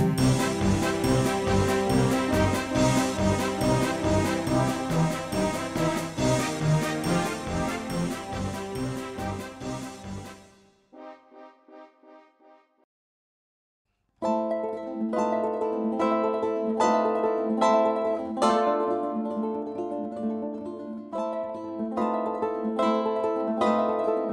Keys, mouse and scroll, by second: 2.3 r, 11.1-13.6 middle drag, 13.6-15.8 drag, 15.8 s, 21.1-23.4 middle drag, 23.4-24.3 drag.